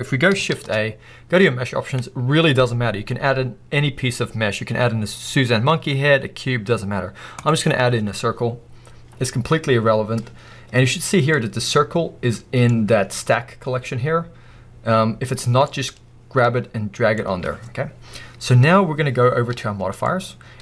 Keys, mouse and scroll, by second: 11.4 click.